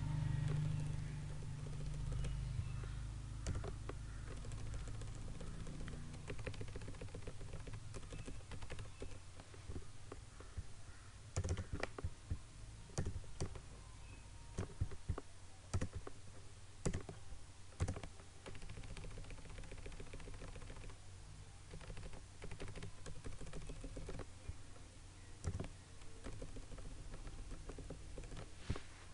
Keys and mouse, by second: 0.6 Down, 3.5 click, 6.3 Left, 8.0 Down, 8.5 Left, 9.1 Down, 11.5-15.7 drag, 18.4 Left, 23.0 Down, 25.4 click, 26.2 Down.